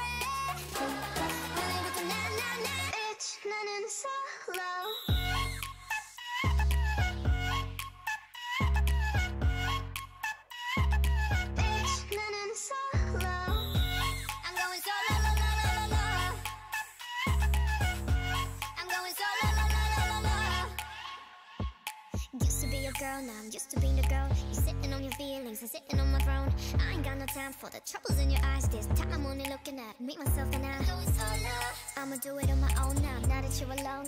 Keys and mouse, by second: 0.3 a, 0.8 a, 1.4 u, 2.0 n, 2.7-4.8 drag, 5.2 click, 6.1 t, 6.8 l, 7.5-16.2 drag, 9.2 l, 20.5 h, 21.1 ctrl+z, 21.6 ctrl+z, 22.0 ctrl+z, 22.3 ctrl+z, 25.0 z, 28.3 z, 32.4 ctrl+e, 33.5 l, 33.9 u.